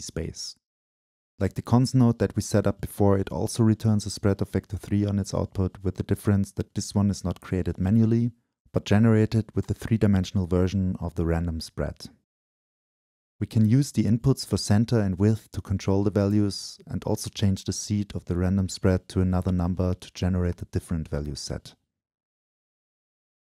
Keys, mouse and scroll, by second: 2.5-4.2 scroll down 2, 4.2-6.1 scroll down 1, 8.7-9.1 drag, 9.1-10.1 middle drag, 9.1-10.1 scroll down 2, 10.1-10.8 drag, 10.1-10.8 scroll down 1, 10.8-12.4 middle drag, 12.4-14.4 right drag, 12.4 scroll down 2, 12.6-13.9 scroll up 2, 14.4-18.1 alt+drag, 18.2-19.3 scroll up 2, 19.3 scroll down 2, 19.5 scroll up 2, 19.7 scroll down 2, 21.9-22.3 right drag, 22.6-23.4 alt+right drag.